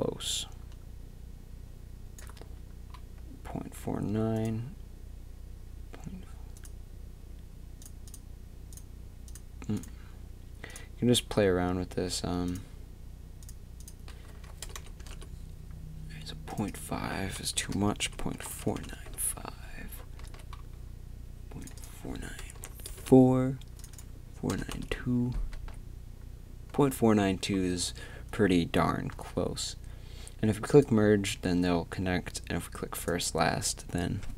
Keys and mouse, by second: 14.8 BackSpace, 18.2 click, 20.2 z, 23.7 middle click, 25.5 z, 29.1 z, 30.7-34.3 drag, 31.3 z.